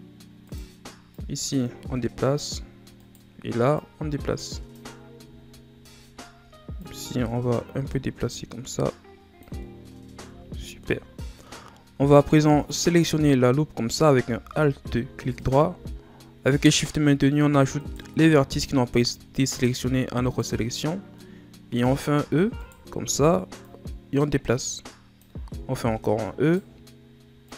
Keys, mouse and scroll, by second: 0.4 right click, 1.1-2.9 drag, 2.9 right click, 3.7-4.9 drag, 4.9-5.3 scroll down 3, 5.3-6.2 shift+scroll up 7, 6.3 scroll up 1, 6.4 right click, 6.7-9.6 drag, 9.6-10.2 scroll down 5, 10.2 Tab, 10.8-11.5 middle drag, 11.5-12.4 scroll up 3, 12.4 middle click, 12.7-14.4 scroll up 1, 14.4 Tab, 15.3 alt+right click, 17.7 shift+right click, 18.9-20.2 shift+scroll up 6, 20.2 shift+right click, 20.9 scroll down 1, 21.1-22.2 middle drag, 22.2 e, 23.6 click, 25.6 e, 27.4-27.5 drag.